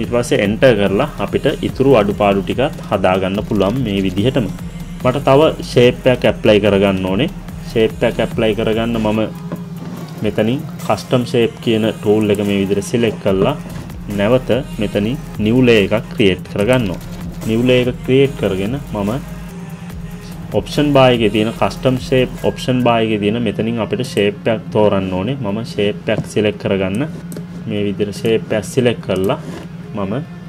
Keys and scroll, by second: 0.4 Return.